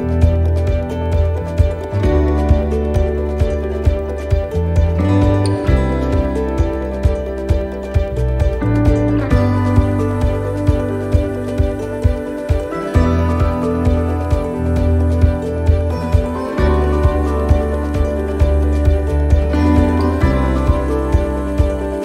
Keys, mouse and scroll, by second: 0.1-1.1 scroll down 1, 1.1-2.0 scroll down 3, 2.0-3.0 scroll down 3, 3.3-3.9 scroll down 3, 3.9-5.8 scroll down 3, 5.8-6.7 scroll down 1, 6.7-7.9 scroll down 4, 7.9-8.9 scroll down 2, 8.9-9.9 scroll down 3, 9.9 scroll down 4, 14.0 click, 16.9 click, 17.8 click, 19.2 click, 20.7 click, 21.1 click, 21.6 click.